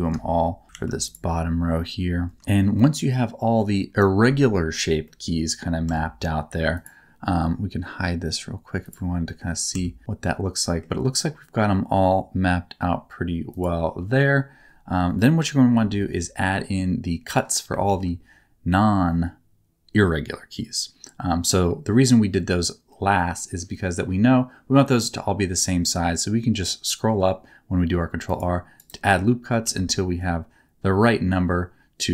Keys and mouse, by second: 0.7 ctrl+r, 5.0 middle click, 5.8 Tab, 8.8 click, 9.2 middle click, 9.7 Tab, 10.0 middle click, 13.5 click, 15.7 KP_7, 17.8 ctrl+r, 28.7 right click, 29.6 ctrl+r.